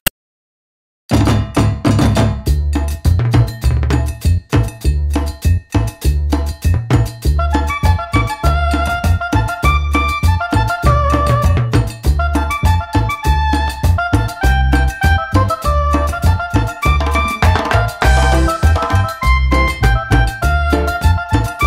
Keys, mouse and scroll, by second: 1.4 click, 2.2 click, 2.9 click, 3.8 click, 5.0 click, 5.9 click, 7.2 click, 7.6 click, 8.7 click, 10.2 click, 10.8 click, 11.7 click, 13.0 click, 13.6 click, 14.7 click, 17.2 click, 17.9 middle click, 18.1 middle click, 19.2 click, 20.2 click, 21.4 click.